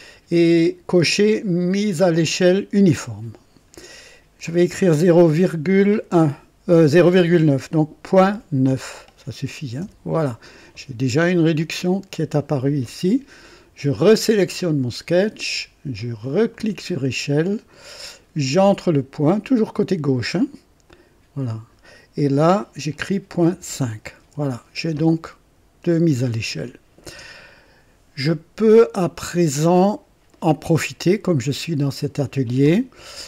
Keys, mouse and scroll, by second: 8.2-9.8 typing, 9.8 KP_Enter, 14.5 click, 16.5 click, 20.9 click, 23.4 ,, 23.6 KP_5, 24.2 Return.